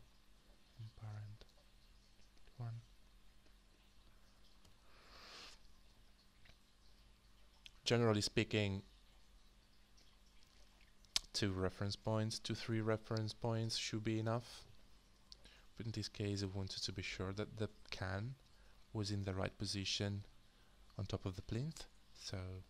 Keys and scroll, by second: 4.6 ctrl+d, 15.2 ctrl+d.